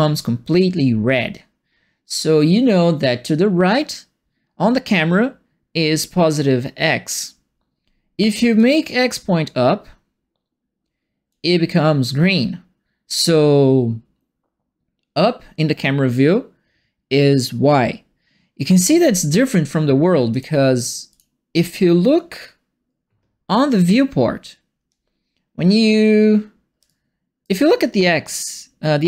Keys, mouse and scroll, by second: 8.5-11.2 drag, 20.3 click, 21.1 click, 26.8 alt+right click.